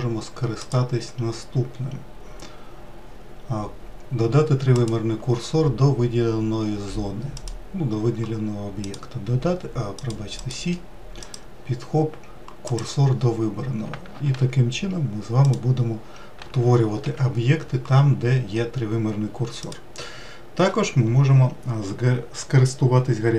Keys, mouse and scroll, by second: 0.5-3.6 drag, 7.2 click, 8.7-10.0 drag, 10.3-13.3 drag, 14.0 shift+a, 16.8 ctrl+z, 19.5 click.